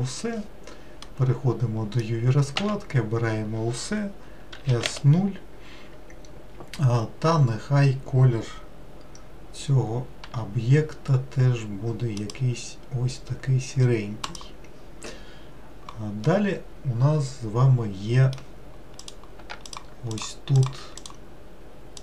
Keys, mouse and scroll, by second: 4.6 s, 10.4 g, 14.5 click, 16.4-19.2 middle drag, 19.2 click, 19.9 shift+click, 20.3 shift+click.